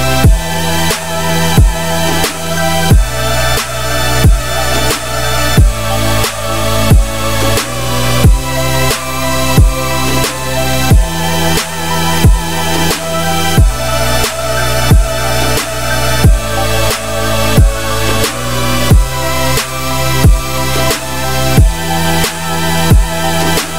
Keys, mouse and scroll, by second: 2.0 click, 2.4 `, 3.3-4.5 scroll up 4, 4.5-4.9 scroll down 1, 4.9-6.0 shift+middle drag, 6.0 Tab, 6.9 ctrl+r, 12.5 click, 12.9 middle click, 13.2 3, 13.4 click, 13.9 middle click, 14.1 `, 14.9-16.5 shift+middle drag, 16.5 e, 23.2-23.7 shift+middle drag.